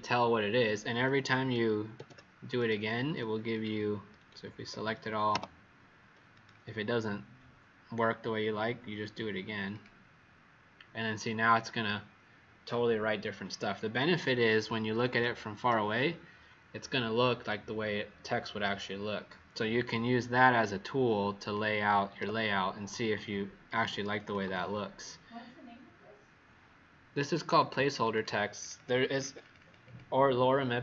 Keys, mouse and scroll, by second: 1.9 ctrl+a, 2.5 right click, 3.5 click, 4.2 ctrl+a, 5.2 Delete, 6.2 right click, 9.6 click, 14.2 ctrl+-, 14.6 ctrl+-, 15.1 ctrl+-, 20.4 click, 22.1 w, 24.3 ctrl+z, 27.3 click, 27.5 click, 27.7 click, 27.9 click, 28.1 click, 28.7 click, 28.9 click, 29.0 click, 29.1 click, 29.4 click, 29.5 click, 29.8 click.